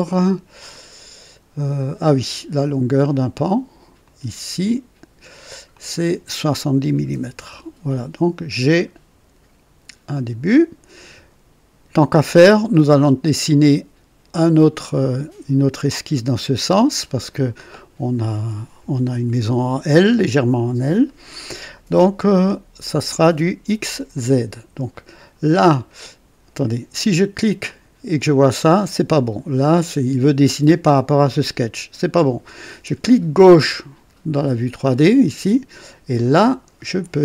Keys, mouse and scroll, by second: 0.6-2.5 drag, 4.0 click, 5.7 click, 6.9 KP_7, 7.1 KP_0, 7.3 Return, 7.4 Return, 8.6 scroll down 1, 10.1 click, 27.6 click, 32.1 click, 33.3 click, 36.3 click.